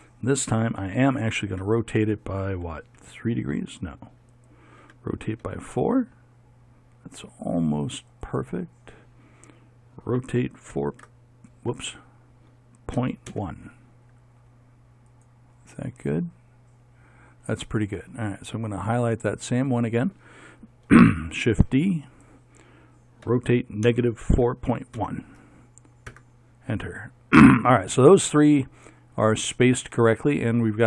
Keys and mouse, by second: 1.5 r, 4.9 r, 10.1 r, 17.3 middle click, 19.4-21.4 right drag, 21.4 shift+d, 23.3 r, 28.5 middle click.